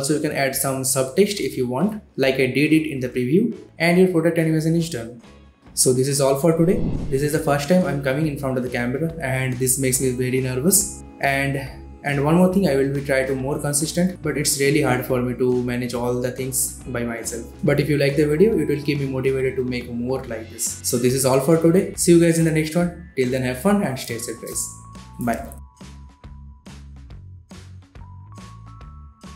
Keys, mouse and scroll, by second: 0.2-0.6 click, 0.6 ctrl+alt+Home, 0.8 ctrl+alt+scroll up 1, 1.0 v, 1.1-1.9 click, 2.0 alt+scroll down 1, 2.1 v, 2.2 click, 2.5 space, 2.8 click, 3.2 space.